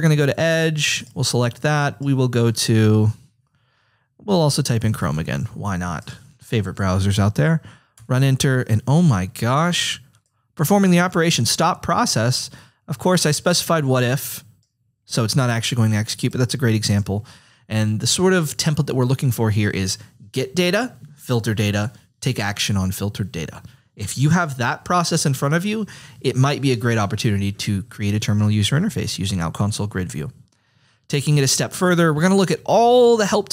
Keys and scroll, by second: 0.0-0.8 typing, 2.9 BackSpace, 4.5-5.5 typing, 8.0 Return.